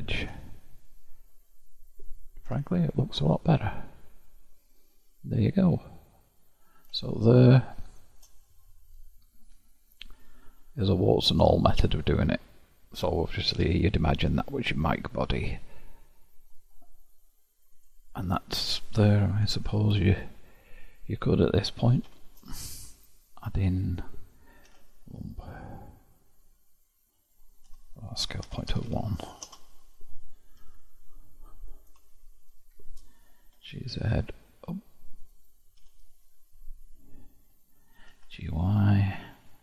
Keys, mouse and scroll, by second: 0.1 scroll down 1, 0.3 ctrl+x, 2.5 scroll down 1, 2.6 Tab, 3.9-4.7 scroll down 3, 5.1-10.2 middle drag, 10.2-11.4 scroll down 11, 11.4-12.7 middle drag, 12.7-13.4 scroll up 5, 13.4 click, 14.5-15.8 scroll down 8, 15.8-16.9 scroll up 3, 16.9-17.8 scroll up 5, 17.8 click, 19.5 KP_7, 20.4-22.1 shift+middle drag, 22.1 shift+a, 24.8 s, 30.7 KP_1, 32.3-33.6 shift+middle drag, 33.6 g, 35.9 KP_7, 38.1 g.